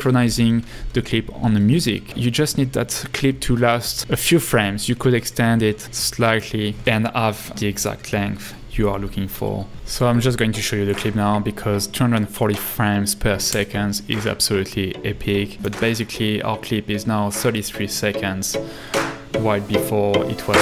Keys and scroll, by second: 6.7 l, 13.5 space.